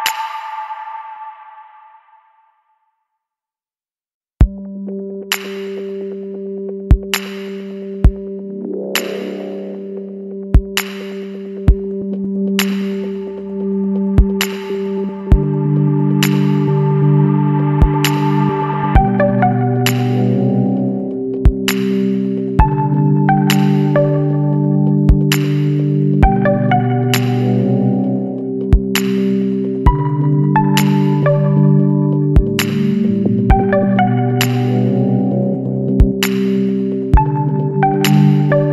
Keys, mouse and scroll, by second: 0.6 click, 1.2 scroll down 1, 1.5 click, 2.2 right click, 4.0 ctrl+v, 4.7 scroll down 2, 5.6 click, 6.1 scroll down 2, 6.8 click, 8.0 click, 10.8 click, 11.8 KP_4, 12.1 KP_2, 13.3 click, 14.7 KP_1, 14.9 KP_4, 16.7 click, 18.0 click, 18.5 scroll down 1, 20.0 click, 20.7 scroll down 1, 22.5 ctrl+v, 23.1 ctrl+scroll down 1, 24.3 click, 24.9 scroll down 2, 25.5 click, 26.6 click, 27.6 click, 28.5 KP_4, 28.8 KP_8, 30.4 click, 32.5 KP_1, 32.9 KP_3, 34.3 click, 35.2 scroll down 1, 35.9 click, 36.6 click, 38.5 click.